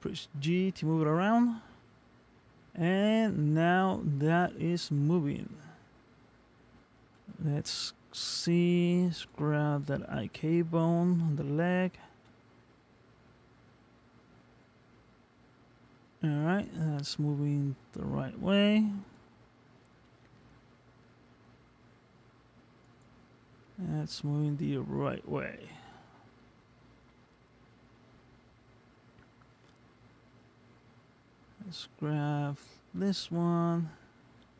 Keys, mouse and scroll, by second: 0.1 g, 5.0 middle click, 6.2-7.4 scroll down 3, 7.5 shift+middle click, 9.2 click, 10.0 click, 11.0 click, 12.2 g, 17.0 middle click, 19.0 click, 20.0 g, 23.6 middle click, 24.8-25.5 scroll up 2, 25.5 middle click, 29.7 middle click, 32.2 click, 33.0 g.